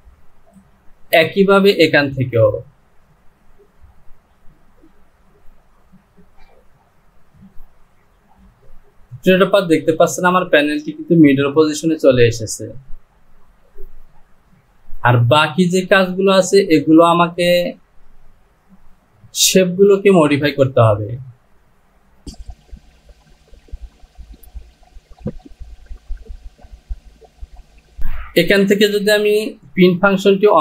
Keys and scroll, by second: 24.4 Delete.